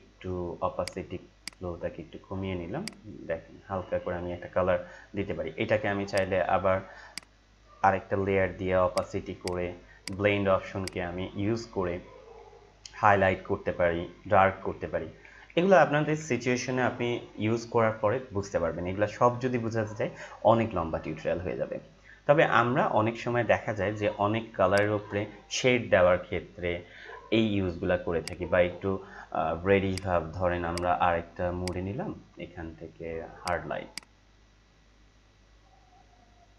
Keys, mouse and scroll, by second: 0.0 ctrl+z, 0.8 click, 1.7 click, 3.1-5.3 drag, 10.5-10.8 scroll down 1, 10.8 click, 11.3-13.1 scroll down 1, 13.1 scroll down 1, 14.7 scroll down 1, 24.7 click, 24.9 Return, 28.2-36.5 drag, 34.2-36.5 drag.